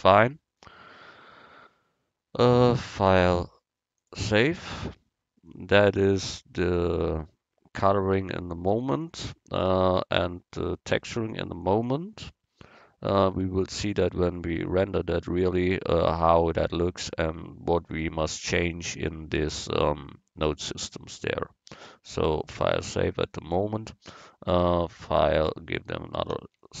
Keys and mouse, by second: 3.2-5.0 drag, 22.6-24.5 drag, 24.9-26.8 drag.